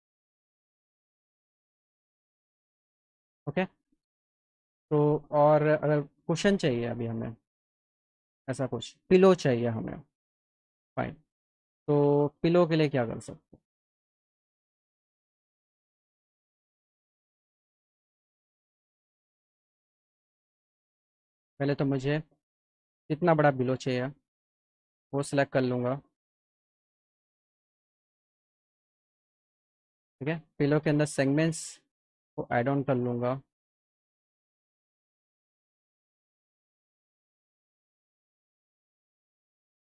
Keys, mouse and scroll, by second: 0.4 click, 0.9 alt+middle click, 7.3 click, 11.7 click, 12.9 click, 13.4 click, 14.2 click, 16.9 alt+middle click, 18.3 alt+middle click, 19.2-20.7 drag, 22.6 click, 26.1 click, 26.9 alt+middle click, 27.1 alt+middle click, 28.0 middle click, 28.4 middle click, 28.8-30.2 alt+middle drag, 31.2 click, 32.2 click, 33.2 click, 34.8 click, 36.4 F4, 37.9 click.